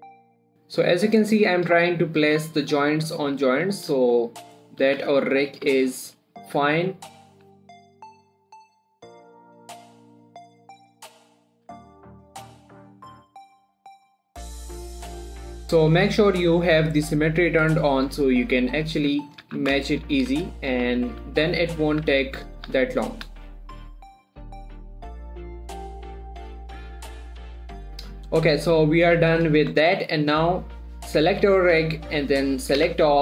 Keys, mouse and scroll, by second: 0.0-0.2 typing, 0.0 click, 0.3 click, 0.6 shift+middle click, 0.8-1.6 shift+scroll up 2, 1.6 right click, 2.3 click, 2.7 g, 3.0 click, 3.6 g, 4.0 click, 4.3 scroll down 1, 4.5 shift+middle click, 5.0 click, 5.3 g, 5.7 click, 6.0 r, 6.4 click, 6.4 g, 6.9 click, 7.5-15.6 typing, 7.6 click, 7.8 right click, 7.9 click, 8.1 click, 8.3 click, 8.6 click, 8.7 shift+middle click, 8.9 click, 9.4 click, 9.5 click, 9.7 click, 10.2 click, 10.4 click, 10.7 click, 10.8 scroll down 3, 10.8 shift+middle click, 11.1-11.4 scroll up 3, 11.4 shift+middle click, 11.6 click, 11.8 click, 12.1 click, 12.3 click, 12.7 click, 13.0 click, 13.1 scroll down 2, 13.1 shift+middle click, 13.3 shift+middle click, 13.7 middle click, 13.9 click, 14.3 click, 14.4 shift+middle click, 14.6 click, 14.9 right click, 15.0 click, 15.2 click, 15.4 shift+middle click, 15.5 click, 15.8 click, 18.2 shift+middle click, 18.4-18.9 shift+scroll up 2, 18.8 shift+middle click, 19.2 click, 19.4 g, 19.7 click, 19.9 z, 20.3 shift+middle click, 20.6 g, 21.0 click, 21.0 click, 21.2 3, 22.2 scroll down 1, 22.3 1, 22.8 scroll down 1, 23.0 z, 23.3 shift+middle click, 24.4-27.8 typing, 24.5 shift+middle click, 24.6 shift+scroll up 1, 24.8 click, 25.1 scroll down 1, 25.3 scroll up 1, 25.7 right click, 26.4 click, 26.8 click, 26.8 shift+middle click, 27.0 click, 27.1 shift+middle click, 27.1 click, 27.3 click, 27.6 click, 27.8 shift+middle click, 28.2 scroll up 1, 28.4 Tab, 28.5 middle click, 30.1 shift+middle click.